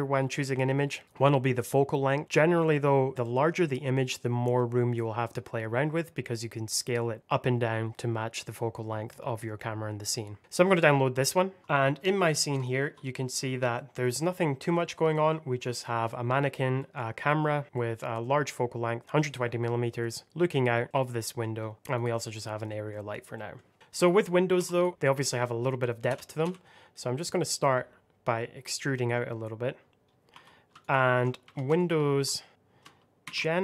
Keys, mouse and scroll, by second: 0.6 scroll down 1, 11.6 shift+middle click, 11.6 middle click, 12.2 scroll up 1, 12.5 shift+middle click, 12.9 middle click, 14.0 scroll down 1, 14.3 middle click, 14.8 scroll up 1, 15.0 middle click, 15.5 click, 16.0 middle click, 16.8 right click, 17.6 click, 17.7 middle click, 21.5 scroll up 1, 21.7 middle click, 21.9 click, 22.6 middle click, 23.7 Tab, 23.9 click, 24.5 2, 24.6 click, 26.0 e, 26.3 x, 29.9 click, 30.0 scroll up 1, 30.4 2, 30.7 alt+click, 31.3 3, 31.7 alt+click, 33.2 ctrl+r.